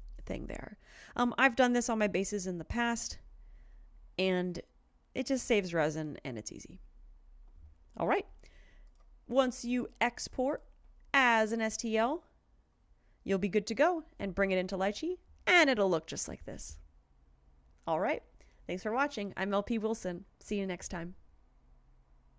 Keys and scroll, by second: 13.8 alt+Tab, 14.4 alt+Tab.